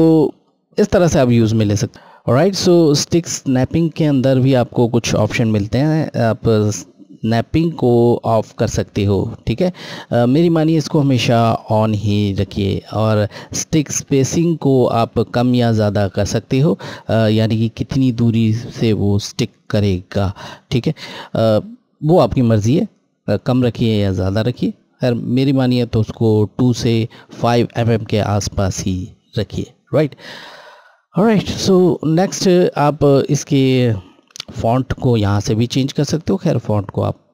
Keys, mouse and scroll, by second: 1.8 click, 2.8 click, 31.6 click, 33.8 click.